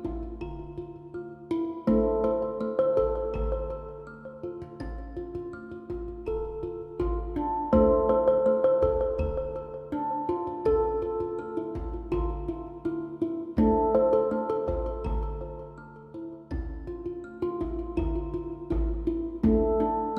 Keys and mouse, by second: 0.1 z, 1.2 z, 2.8 ctrl+z, 3.7 z, 4.3 ctrl+i, 5.0 middle click, 5.1 z, 8.0 z, 9.0 z, 10.3 z, 10.8 middle click, 12.6 z, 13.2 a, 13.6 z, 15.1 z, 15.9 z, 16.8 a, 18.0 z, 18.2 l, 18.5 click, 18.6 z.